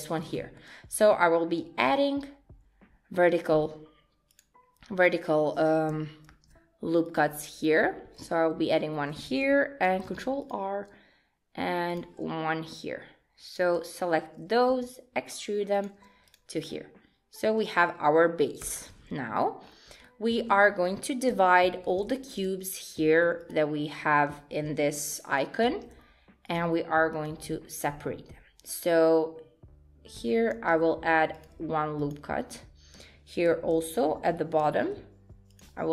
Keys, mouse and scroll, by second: 0.4 shift+middle click, 1.7 shift+r, 4.3 click, 6.3 ctrl+r, 9.9 ctrl+r, 12.7 click, 14.7 e, 16.3 click, 16.7 middle click, 18.6 KP_1, 19.2-19.6 scroll down 2, 19.6 scroll up 4, 20.0 shift+middle click, 21.9 ctrl+r, 25.7 ctrl+r, 30.6 ctrl+r, 34.7 ctrl+r.